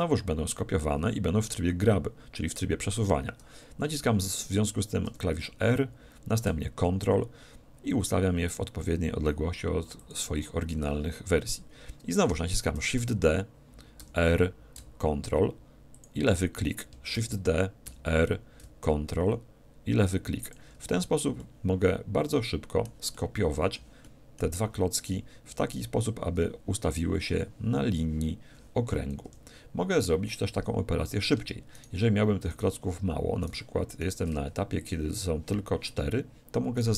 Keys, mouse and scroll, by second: 10.1-11.9 drag, 12.8 shift+d, 16.0-17.7 drag, 17.1 shift+d, 17.8 click, 20.5-22.1 drag, 21.4-26.0 middle drag, 29.3 KP_7, 31.8-35.9 right drag, 34.5 x, 36.8-36.9 right drag.